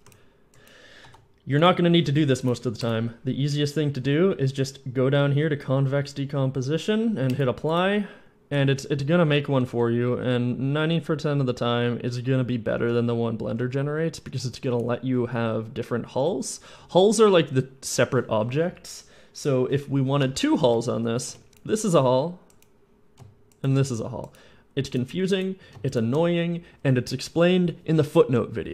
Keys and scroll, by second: 0.9 F11, 8.4-11.3 typing, 12.6-14.1 typing, 21.1 Tab, 21.4 a, 21.5 Tab, 21.5 y.